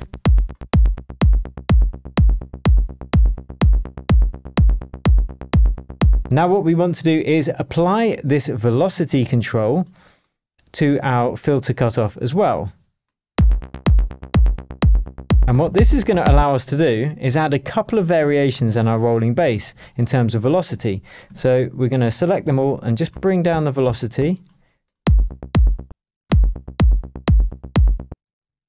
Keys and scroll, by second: 21.2 super+a, 25.0 super+space, 25.7 space, 28.0 space.